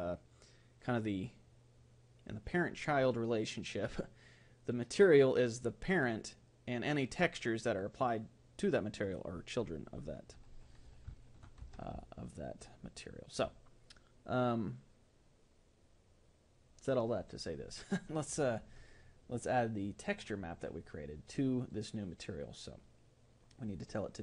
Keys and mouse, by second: 11.2-16.7 middle drag, 13.0 a, 21.1-24.2 drag.